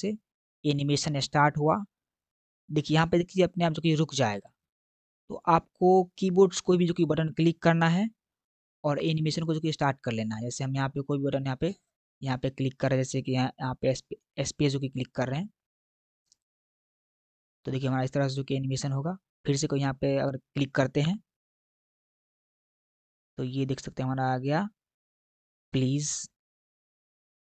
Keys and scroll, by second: 15.2 space, 20.9 space.